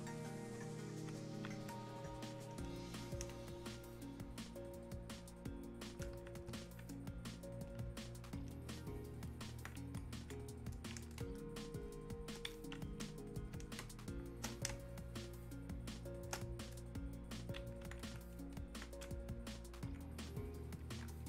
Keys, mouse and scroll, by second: 1.3-3.3 alt+drag, 3.3 ctrl+space, 6.7-10.2 alt+drag, 11.2 space, 11.8 click, 12.0 space, 13.4 click, 13.8 space, 15.3 click, 15.4 space, 16.9-21.2 drag.